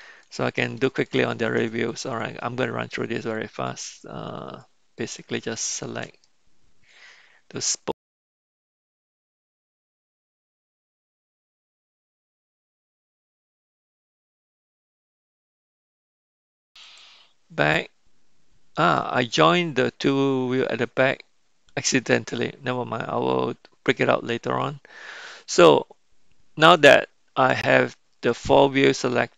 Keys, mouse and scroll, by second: 0.2-0.8 shift+middle drag, 1.0 middle click, 1.9-2.3 shift+drag, 3.2-3.5 shift+drag, 3.6-4.0 shift+drag, 4.3-4.7 shift+drag, 5.0-5.3 shift+drag, 5.5-6.0 shift+drag, 6.2-8.0 middle drag, 8.2 shift+click, 8.4 middle click, 8.8 ctrl+j, 8.8 shift+click, 9.7 middle click, 9.9 click, 10.0 shift+middle click, 10.1 shift+click, 10.4 shift+click, 10.5 middle click, 10.7 shift+click, 10.8 shift+click, 11.3 ctrl+j, 11.3 KP_Decimal, 11.5 click, 11.9 e, 12.4 middle click, 12.5 click, 12.6 shift+middle click, 12.7 shift+click, 12.7 middle click, 13.0 shift+click, 13.3 shift+click, 14.1-15.6 drag, 14.5 shift+e, 15.2 shift+e, 15.8 click, 15.9 click, 16.1 click, 16.2 click, 16.9 click, 19.3-24.3 middle drag, 28.9 shift+drag.